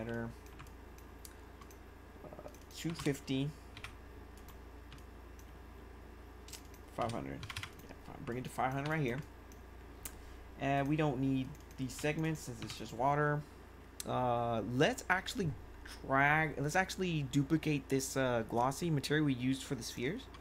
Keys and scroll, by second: 2.6-3.7 typing, 4.8 1, 6.9 5, 7.4 0, 8.8 1.